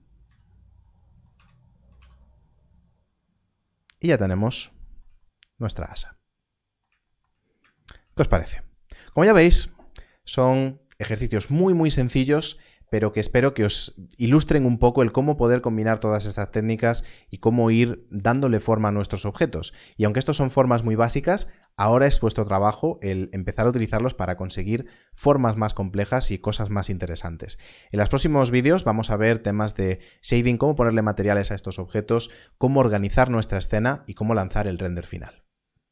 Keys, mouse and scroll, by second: 0.2 z, 1.2 Tab, 1.9 alt+a.